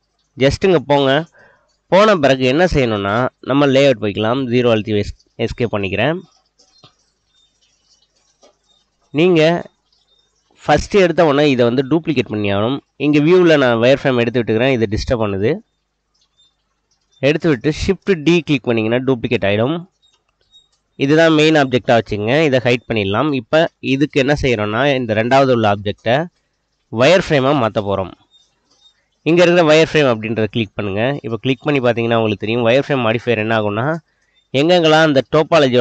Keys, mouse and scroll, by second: 3.8 KP_0, 6.7-7.4 middle drag, 7.6-8.4 middle drag, 10.3 click, 12.7-14.4 drag, 16.5 click, 18.6 shift+d, 21.3 click, 22.8 click, 27.0-29.7 drag, 31.0-31.7 middle drag, 32.9 click, 33.7-35.0 middle drag.